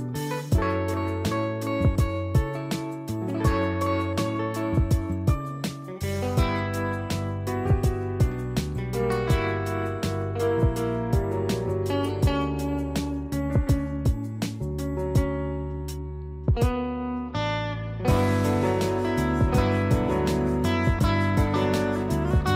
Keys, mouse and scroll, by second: 1.3 w, 3.6 click, 6.9 z, 7.1 click, 11.8 shift+F6, 15.7 ctrl+j, 16.5 click, 18.5 click, 20.8 ctrl+z, 21.7 click.